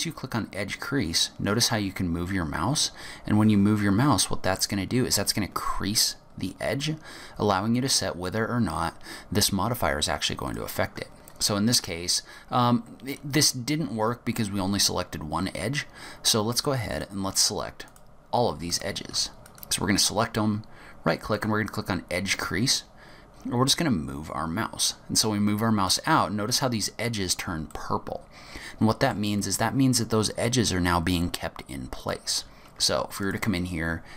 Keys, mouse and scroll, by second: 17.0 click, 18.0 shift+click, 18.8 shift+click, 19.6 right click, 27.8 middle click, 32.1 click, 33.3 shift+click.